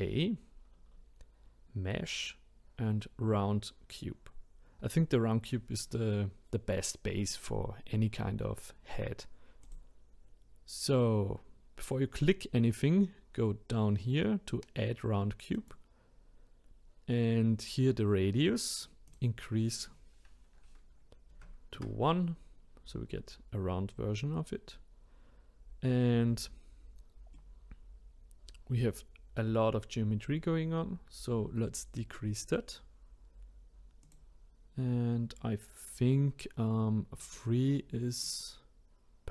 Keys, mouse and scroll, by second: 15.5-18.6 drag, 19.1-22.2 drag, 27.3-30.3 middle drag, 32.4-37.1 drag, 38.2-39.3 middle drag.